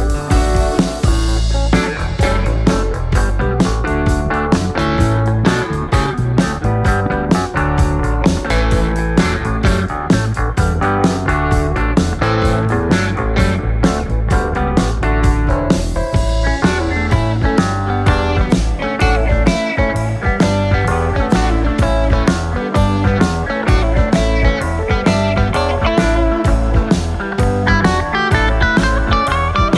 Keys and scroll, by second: 0.7 ., 3.1-3.8 typing, 8.3 alt+Tab.